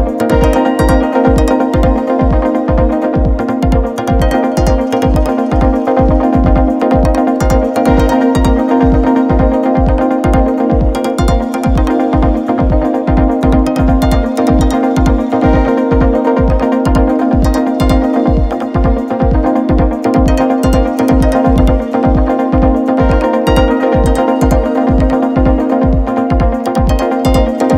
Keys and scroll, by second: 12.4 Up, 15.2 p, 15.3 Up, 15.4 Up, 15.5 Up, 16.4 Left, 16.5 Left, 16.7 Left, 16.9 Left, 17.0 Left, 17.1 Left, 17.3 Left, 17.5 Left, 20.8 Up, 20.9 Up, 22.0 Up, 22.7 Up, 22.9 Up, 23.8 Left, 23.9 Left, 24.0 Left, 24.2 Left, 24.3 Left, 24.5 Left, 24.8 Left, 24.9 Left, 25.0 Left, 25.1 Left.